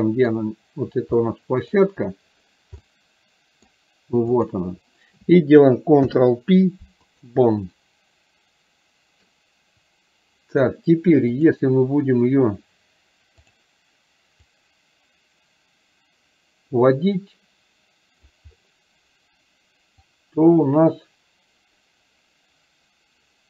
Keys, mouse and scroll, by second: 1.3-1.8 middle drag, 2.9-3.8 middle drag, 4.6 click, 6.2 ctrl+p, 7.8-9.3 middle drag, 11.4 click, 14.6-18.4 drag, 20.3-23.4 drag.